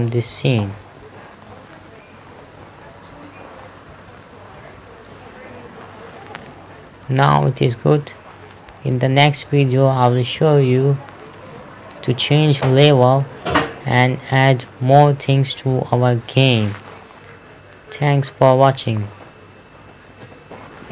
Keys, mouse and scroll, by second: 0.7-5.2 typing, 6.0 Escape, 6.9 middle click, 7.8 scroll up 1, 9.2 middle click, 10.0 middle click, 12.4 click, 14.1 middle click, 16.2 shift+middle click, 20.7 F11.